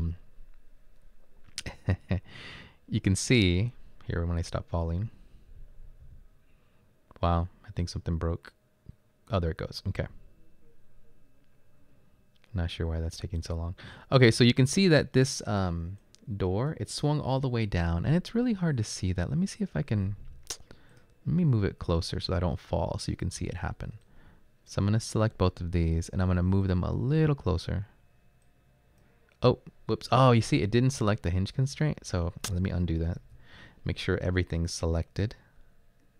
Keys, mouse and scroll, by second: 33.2 ctrl+z.